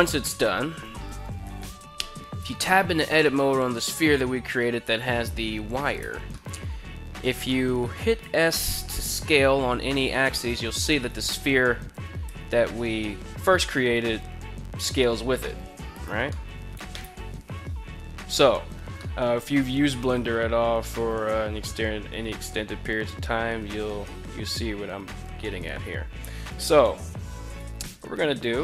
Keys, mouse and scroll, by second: 0.9 right click, 1.8 Tab, 2.8 middle click, 4.7 Tab, 5.5 Tab, 5.8 middle click, 6.9 middle click, 7.7 s, 8.4 y, 10.4 right click, 11.4 s, 11.7 y, 15.5 right click, 15.8 middle click, 16.5 KP_1, 18.5 shift+middle drag, 27.0 s, 27.4 z.